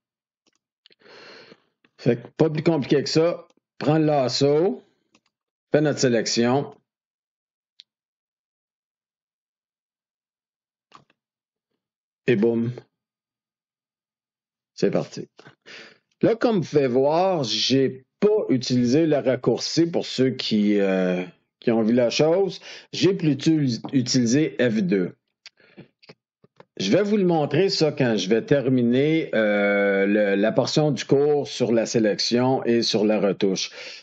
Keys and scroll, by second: 12.2 F2, 26.4 ctrl+d.